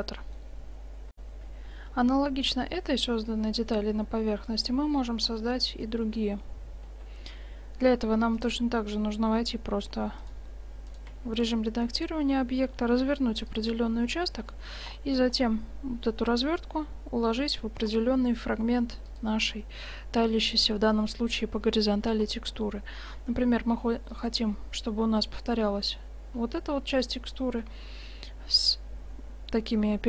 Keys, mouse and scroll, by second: 0.2-0.7 middle drag, 1.2 F9, 6.9 Tab, 8.4 click, 12.2-13.6 drag, 13.1 u, 15.1-17.9 middle drag, 16.5 g, 20.0-21.4 middle drag, 22.1 g, 24.5-29.6 middle drag.